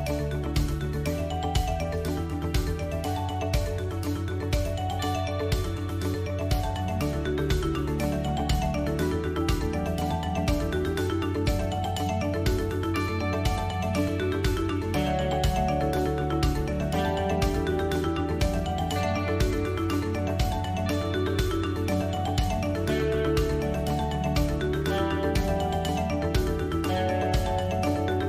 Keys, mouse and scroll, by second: 0.3-5.2 alt+shift+drag, 5.2 ctrl+KP_Add, 7.8 a, 8.5 s, 10.3 g, 13.8 s, 15.8 g, 21.5 ctrl+KP_Add, 22.5 g, 25.0 a.